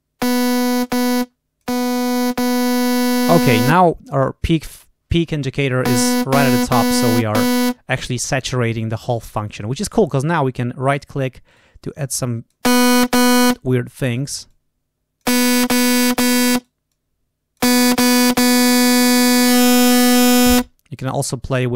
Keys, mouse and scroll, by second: 1.1 click, 1.9-3.7 drag, 6.7 click, 10.2 right click, 11.0 right click, 11.4 right click, 11.9 click, 13.9 right click, 14.4 click, 15.7 click, 16.5 right click, 16.8 click, 19.3-20.4 drag.